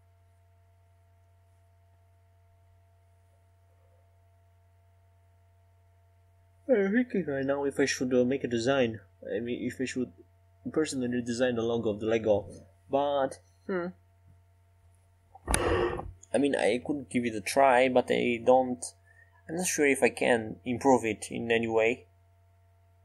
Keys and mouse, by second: 3.7 click, 6.6-8.4 drag, 7.1-8.4 right drag, 8.2-10.9 middle drag, 12.7-13.8 right drag, 13.8-21.3 drag, 17.7 right click, 18.9 a.